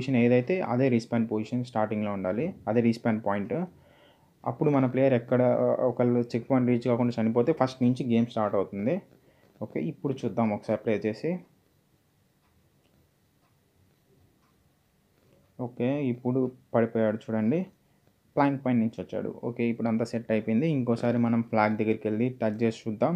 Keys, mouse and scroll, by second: 0.0-2.3 typing, 0.6 Return, 3.0 Return, 4.2 ;, 5.7 ctrl+Num_Lock, 6.2 ctrl+s, 8.8 click, 12.5 click, 15.9-16.7 typing, 19.1-21.0 typing.